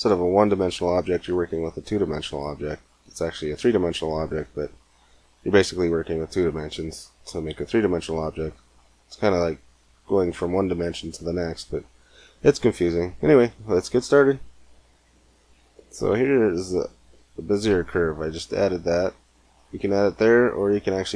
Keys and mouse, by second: 15.9 g, 17.7 shift+a.